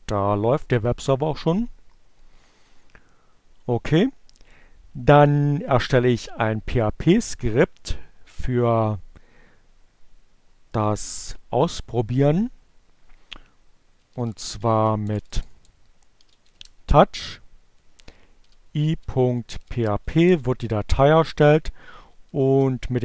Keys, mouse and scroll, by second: 0.6 click, 10.7 t, 12.8-17.6 typing, 17.8 Return, 20.9 n, 21.2 o, 22.2 space.